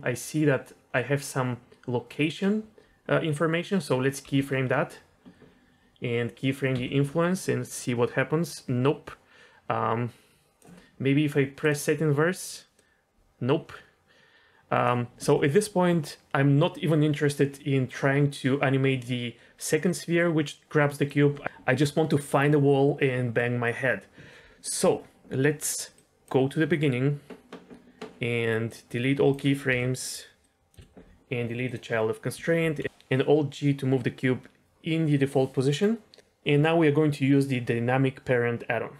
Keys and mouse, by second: 4.2 i, 6.7 i, 7.7-10.6 drag, 11.6 click, 12.7-14.8 drag, 19.9-21.0 drag, 25.7 click, 25.9 click, 28.6 click, 29.6 Delete, 30.4-30.7 drag, 30.7 Delete, 32.6 alt+g.